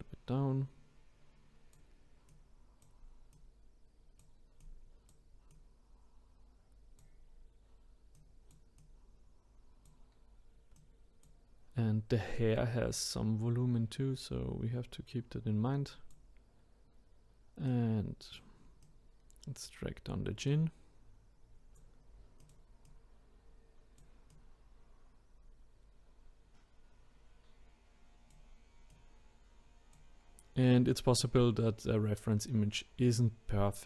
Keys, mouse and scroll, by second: 2.3-3.4 drag, 5.5 click, 8.1-13.0 drag, 17.7 click, 18.8 click, 20.5 click, 22.4 click, 24.3 click, 28.9-30.7 drag.